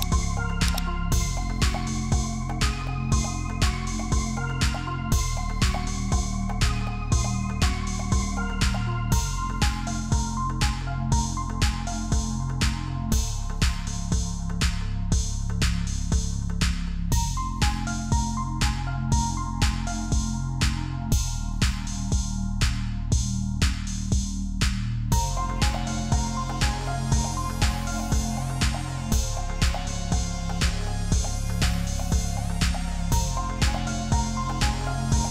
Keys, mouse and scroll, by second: 1.4 ctrl+j, 3.2 ctrl+t, 4.8 ctrl+t, 5.6 Return, 10.8 alt+scroll up 1, 15.8 Down, 15.9 Down, 16.3 Up, 16.6 Return, 16.8 Down, 17.1 Up, 18.8 double click, 32.7 alt+scroll down 1, 33.5 F10, 34.2 p, 34.6 alt+scroll up 1, 34.8 space.